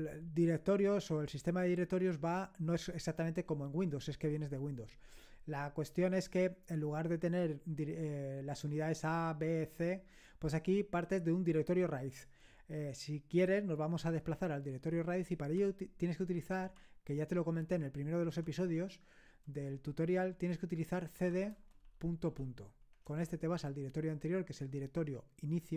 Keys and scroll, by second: 21.0-23.1 typing.